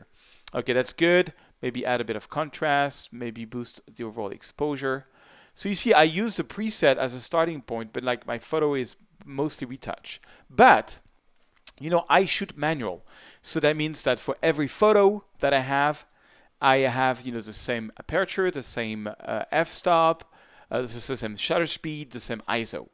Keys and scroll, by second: 13.5 shift+space, 16.0 shift+space.